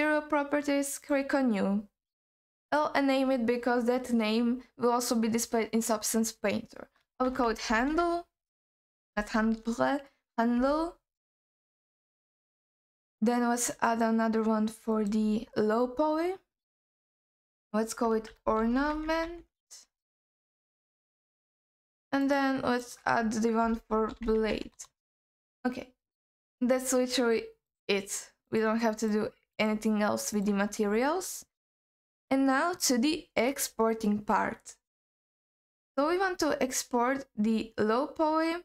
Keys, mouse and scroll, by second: 1.2 click, 2.7-11.3 drag, 9.3 BackSpace, 12.0 click, 13.9 click, 14.9-20.4 drag, 20.9 click, 22.2 click, 22.8-25.4 drag, 26.0-26.4 scroll up 1, 26.4 click, 27.7 click, 28.4 click, 29.5 click, 30.3 click, 30.9-31.5 scroll down 2, 31.5-32.0 scroll up 1, 32.0 click, 32.4-34.2 scroll down 2, 36.1-36.5 scroll up 2, 36.5-38.6 scroll down 3.